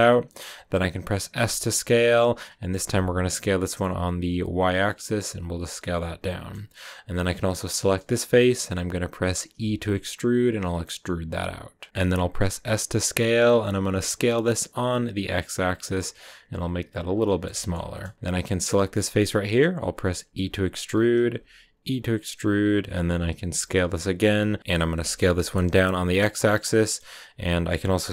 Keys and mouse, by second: 0.2 middle click, 1.3 s, 1.9 x, 3.3 y, 5.4 click, 5.7 click, 7.3 click, 7.9 click, 10.6 e, 11.7 click, 11.9 s, 13.8 x, 16.8 click, 17.2 middle click, 17.5 shift+click, 17.9 click, 18.5 click, 18.9 click, 20.1 r, 20.8 click, 22.4 click, 22.4 e, 23.0 s, 23.4 x, 24.8 s, 25.0 x, 26.2 click, 26.8 click, 27.9 s.